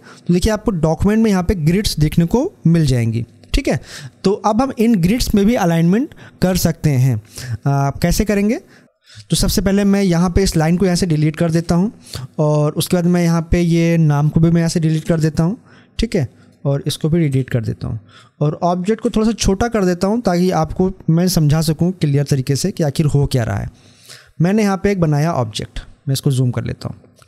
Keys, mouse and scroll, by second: 8.3 scroll up 1, 13.1 click, 16.2-25.0 drag, 25.0 scroll up 1.